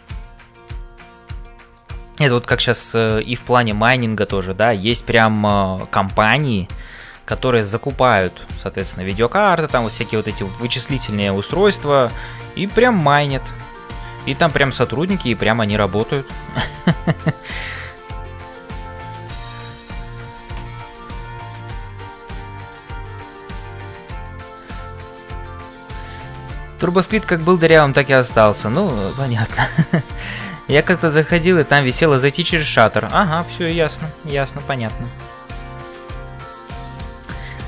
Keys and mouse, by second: 0.0-37.6 typing, 3.5 shift+right click, 4.3 shift+middle click, 20.3 middle click, 34.3 click, 35.0 click, 36.3 click, 36.9 click, 37.5 middle click.